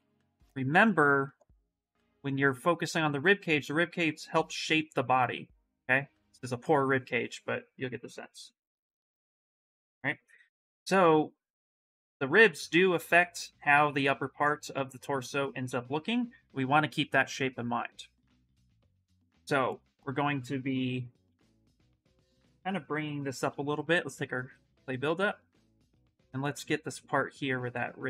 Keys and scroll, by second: 20.5 ctrl+b, 21.0 ctrl+n, 23.9 s.